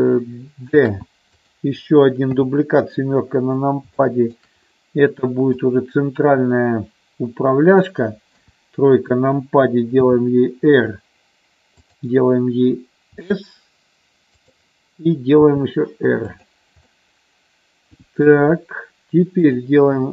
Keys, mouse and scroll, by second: 0.7 shift+d, 1.3 click, 2.3 KP_7, 4.0 shift+middle click, 5.5-7.8 drag, 8.2 KP_3, 10.0 r, 11.8 click, 13.2 s, 14.4 click, 15.4 r, 16.3 click, 16.9-18.2 middle drag.